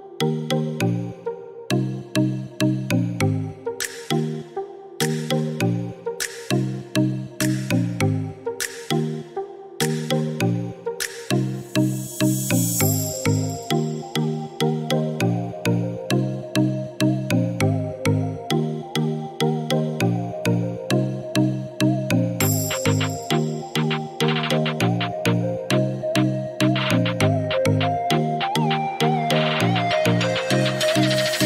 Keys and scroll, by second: 21.5 Delete, 31.3 Delete.